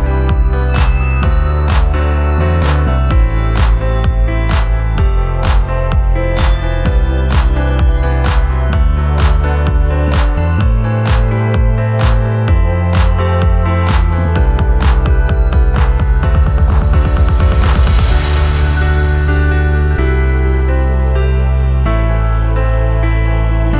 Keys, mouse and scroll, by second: 0.2 click, 1.0-3.1 drag, 3.8 alt+scroll up 2, 4.0 alt+click, 5.0 scroll up 1, 5.3 alt+middle click, 5.6 middle click, 5.6 scroll up 1, 5.8 alt+middle click, 6.2 alt+click, 6.5-7.6 alt+middle drag, 7.6 scroll up 1, 7.8-8.8 scroll down 4, 8.3 alt+middle click, 8.7 middle click, 9.0 alt+click, 10.3 alt+click, 11.0 alt+click, 13.5 alt+click, 14.2 alt+click, 15.1 click, 18.7-22.8 drag, 23.4 click.